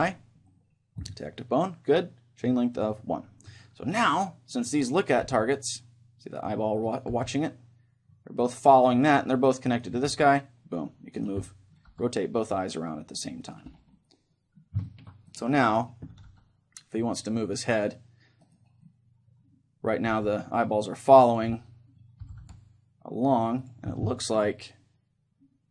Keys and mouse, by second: 2.7-4.7 drag, 3.9 right click, 4.7-6.4 right drag, 5.3 g, 6.5-8.7 right drag, 7.2 g, 8.7-11.3 middle drag, 10.1 g, 11.3 right click, 11.5-13.1 middle drag, 11.9 g, 13.5-17.7 right drag, 13.9-17.3 middle drag, 16.1 r, 17.9-19.5 drag, 18.5-19.5 right drag, 18.9 middle click, 19.7 click, 19.9 middle click, 20.1 right click, 20.1 g, 21.4-23.1 drag, 21.5-23.5 middle drag, 22.3 g, 23.7-25.4 drag, 24.1-25.7 middle drag.